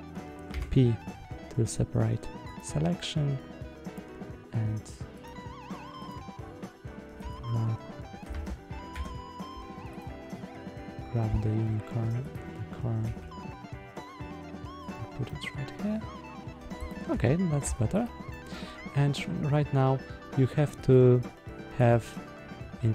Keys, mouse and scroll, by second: 0.4 p, 5.1 click, 5.9 click, 7.0 g, 8.2 Escape, 8.8 Tab, 9.8 click, 12.1 click, 12.9 g, 14.7 click, 15.1-16.4 middle drag, 16.7 click, 17.0 Tab, 17.5 Tab, 17.9 click, 18.2-18.5 middle drag, 20.7-22.0 drag.